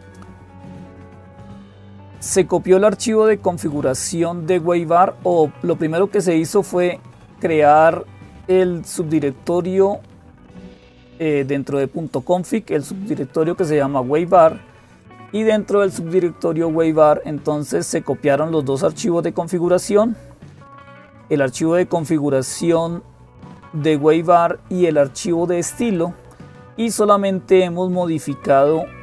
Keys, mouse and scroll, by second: 0.0-29.0 typing, 0.9-6.5 drag, 6.7-9.6 drag, 12.5-15.3 drag, 20.8-23.1 drag, 25.8 click, 28.6-29.0 drag.